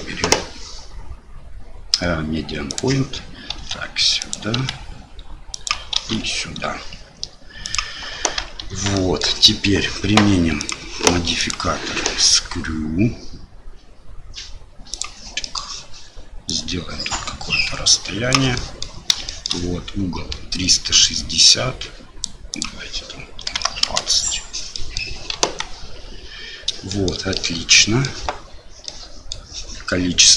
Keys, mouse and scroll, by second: 3.6 s, 4.6 g, 6.0 shift+d, 8.7 Tab, 8.9-9.2 drag, 10.6 click, 11.5-15.0 drag, 15.4 middle click, 16.5-18.3 drag, 18.5 middle click, 19.3 shift+middle click, 21.6 click, 22.6-24.5 drag, 24.7 middle drag, 25.3 KP_1, 26.9 shift+middle click, 27.3-28.0 middle drag, 28.9-29.3 middle drag.